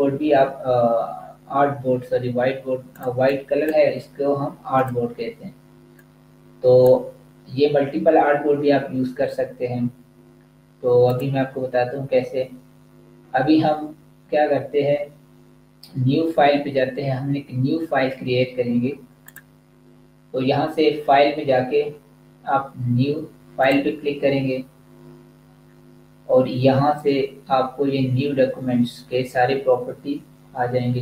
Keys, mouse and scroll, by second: 3.0 click, 11.0 click, 19.2 click, 23.7 click.